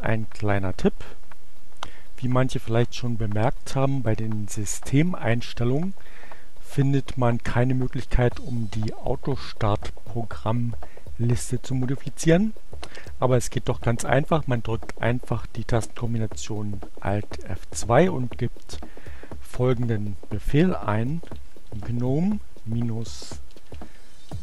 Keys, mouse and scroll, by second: 1.4 click, 4.6 click, 6.0-7.3 drag, 15.2 alt+F2, 19.8-20.8 typing, 22.4-23.6 typing.